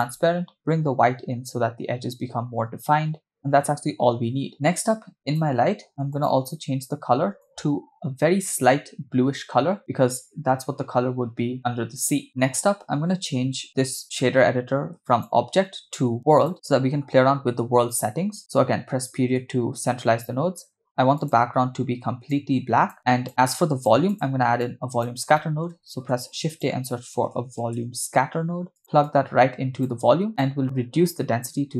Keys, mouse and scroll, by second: 0.6-3.5 drag, 5.3 click, 6.1 click, 15.1-16.5 drag, 18.3 scroll down 2, 18.4 middle click, 19.1 KP_Decimal, 20.6-20.9 scroll down 1, 21.2 click, 22.9 click, 24.1 click, 24.8 click, 25.4 middle click, 25.9 shift+a, 29.1-30.1 drag, 30.3-31.7 drag.